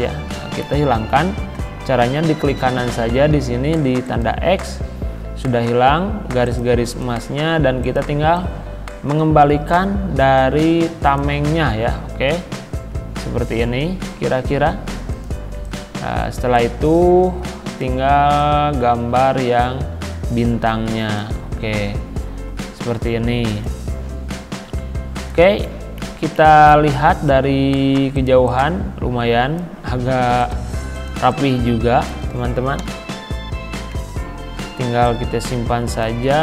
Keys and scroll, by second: 12.5 Left, 13.4 Right, 32.8 Delete.